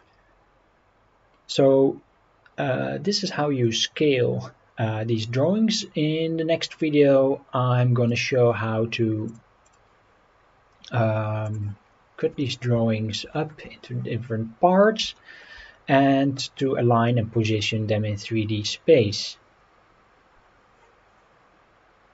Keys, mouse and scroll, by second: 8.1 scroll down 2, 9.3 click, 9.7 click, 11.4 click, 11.8 scroll down 2, 12.4 shift+middle drag, 13.0 scroll down 2, 13.3 shift+middle drag, 15.2 shift+middle drag, 18.4 scroll up 1.